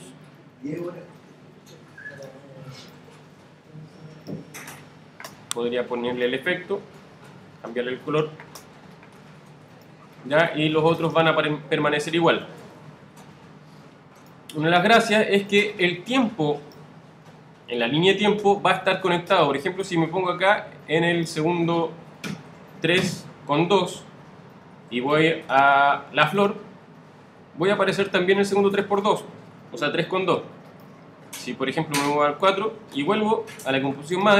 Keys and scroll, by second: 12.3 super+z.